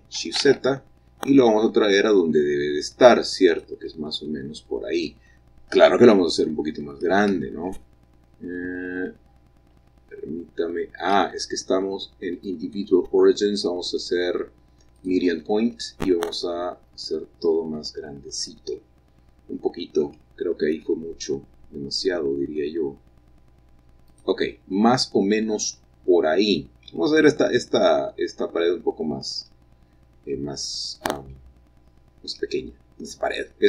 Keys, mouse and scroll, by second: 0.0 g, 0.7 z, 3.8 click, 4.5 middle click, 4.7-6.4 middle drag, 6.4 s, 7.6 Escape, 10.1 s, 11.5 Escape, 12.7-13.8 drag, 15.3 click, 16.0 s, 18.7 click, 21.2 s, 24.4 click, 24.7 click, 29.0-30.4 scroll up 2, 31.1-31.9 scroll down 2, 32.0 middle click.